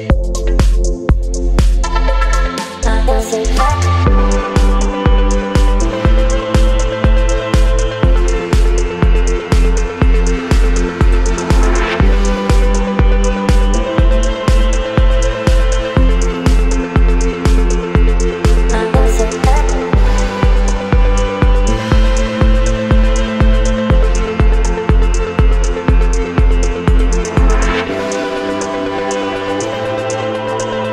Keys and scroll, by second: 4.4 space, 7.2 t, 21.2 ctrl+a, 24.5 v.